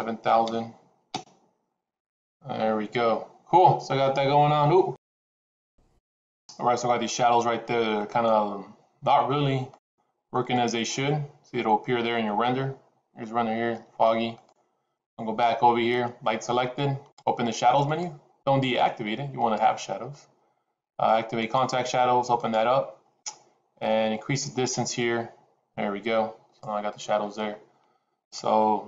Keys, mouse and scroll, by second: 17.8 click, 18.7 click, 19.4 click, 21.5 click, 22.4 click, 24.6-26.9 drag.